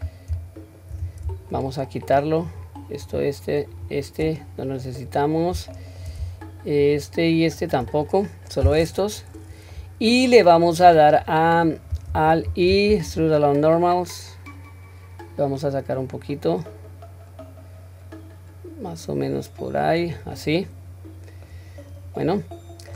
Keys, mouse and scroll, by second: 1.6 shift+click, 2.5 shift+click, 3.1 shift+click, 3.7 shift+click, 4.4-4.8 middle drag, 5.2-5.6 scroll up 1, 5.8 shift+middle click, 6.9 shift+click, 7.4 shift+click, 8.0-8.5 middle drag, 9.3-9.7 scroll down 1, 9.7-10.9 middle drag, 12.8 alt+e, 20.4-21.5 middle drag, 21.8-22.9 scroll up 2, 22.2 middle click.